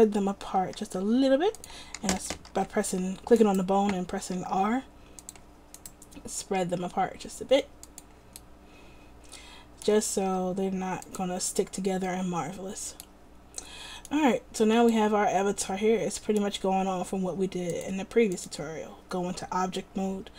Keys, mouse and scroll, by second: 0.7 r, 2.1 a, 2.3 a, 2.6 alt+r, 3.5-5.4 drag, 4.5 r, 6.6 r, 10.3 r.